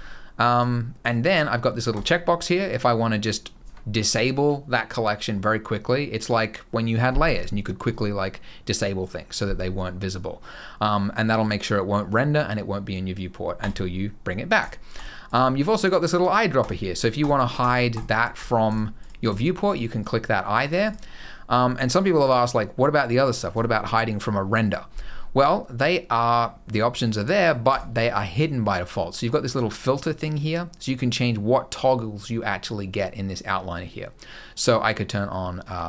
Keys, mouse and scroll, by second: 0.3 click, 1.7 click, 13.4 click, 14.3 click, 14.7 click, 15.0 click, 16.3 click, 16.9 click, 17.3 click, 17.7 click, 18.1 click, 18.4 click, 18.7 click, 19.0 click, 19.4 click, 19.7 click, 20.4 click, 20.6 click, 22.0 click, 27.4 click, 29.2 click.